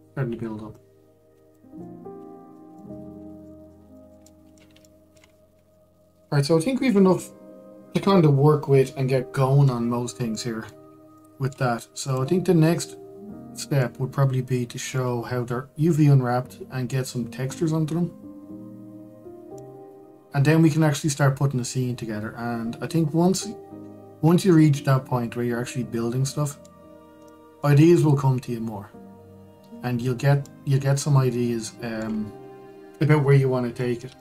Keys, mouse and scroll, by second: 0.1-1.4 shift+middle drag, 1.4 click, 2.5-3.8 middle drag, 3.8-4.1 scroll up 2, 4.1-6.0 middle drag, 6.0-6.4 scroll down 2, 6.4-9.6 middle drag, 11.0-11.5 middle drag, 11.5 scroll up 2, 11.8-12.7 middle drag, 12.7 click, 14.5-16.4 middle drag, 16.4-19.5 scroll down 2, 20.2-24.0 middle drag, 27.9-29.6 middle drag, 29.6 scroll up 1, 30.2 scroll up 1, 30.5-31.1 scroll down 2, 31.1-33.0 middle drag, 33.0-34.2 scroll up 2.